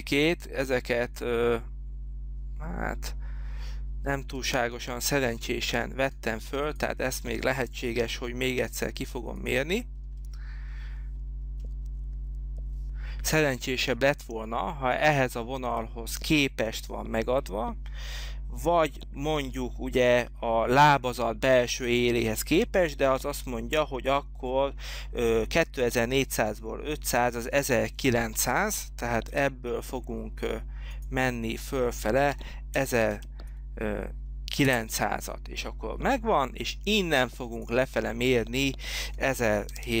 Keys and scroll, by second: 29.4 t, 32.2-33.6 typing, 34.8 Return, 39.4-40.0 typing.